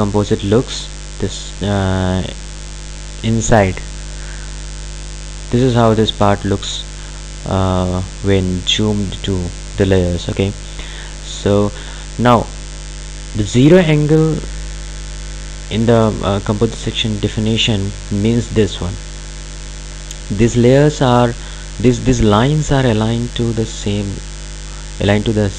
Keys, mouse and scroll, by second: 2.5 click.